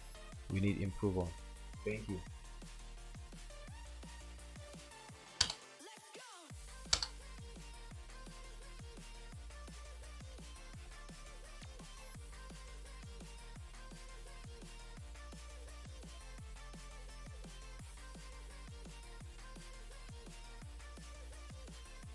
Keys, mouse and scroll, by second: 4.3 ctrl+w, 5.5 Return, 7.0 Return.